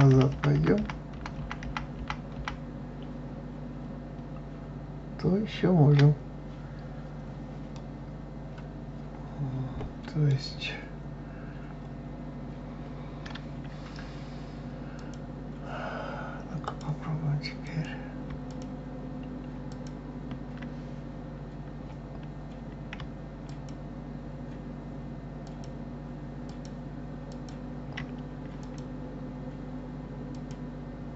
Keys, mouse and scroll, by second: 7.4 scroll up 1, 7.4-10.4 middle drag, 14.6 click, 16.3 click, 17.3 click, 18.1 shift+click, 19.3 shift+click, 23.1 alt+shift+click, 25.1 alt+shift+click, 26.2 alt+shift+click, 27.0 alt+shift+click, 28.3 alt+click, 30.0 alt+click.